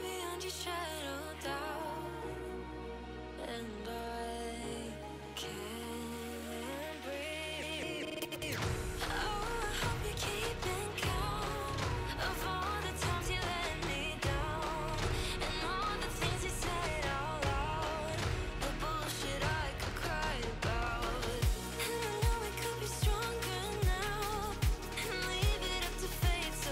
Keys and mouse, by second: 0.5 click, 3.3 click, 4.2 click, 4.8 click, 5.7 click, 6.2 KP_2, 6.3 KP_0, 7.0 click, 9.2 click, 9.6 KP_1, 10.3 click, 12.6 click, 13.9 click, 16.6 click, 20.9 click, 22.0 click, 22.5 KP_1, 22.6 KP_0, 23.5 click, 24.6 KP_5, 25.0 click, 25.4 KP_2, 25.9 click.